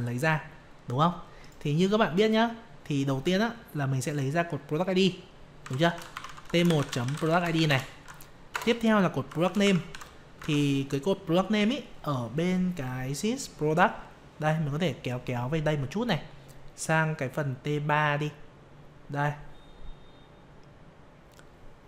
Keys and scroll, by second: 10.4 alt+Tab.